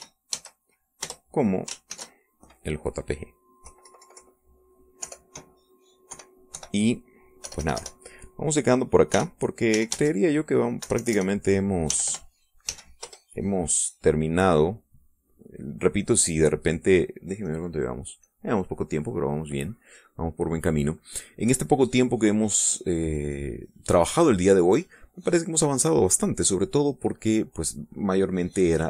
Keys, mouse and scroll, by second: 0.3 k, 0.9 r, 1.3 a, 2.0 Return, 2.9 ctrl+shift+s, 4.6 Left, 6.0 BackSpace, 7.1 KP_4, 7.5 End, 8.4 BackSpace, 10.1-13.6 typing, 14.0 Return, 15.0 click, 15.7 middle click, 16.2 click, 18.4 click, 19.2 click, 20.5 click, 28.3-28.8 drag.